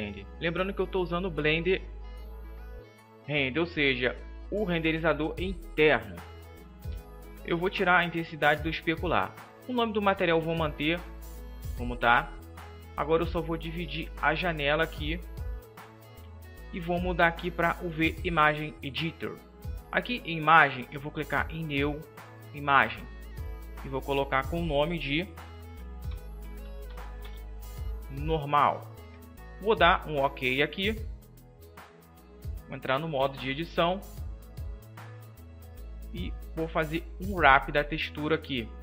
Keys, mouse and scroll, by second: 7.7-9.7 drag, 13.8-27.1 drag, 32.7 Tab, 32.7-37.0 middle drag, 37.0 u.